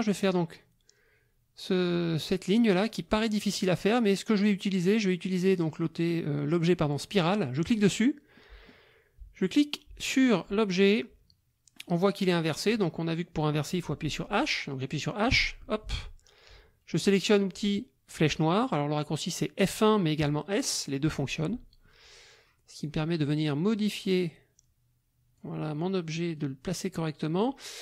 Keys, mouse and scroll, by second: 7.6 click, 8.3 click, 9.4-12.8 drag, 15.3 h, 21.1 s, 21.5 F1, 22.8-25.5 drag, 26.4-27.6 drag.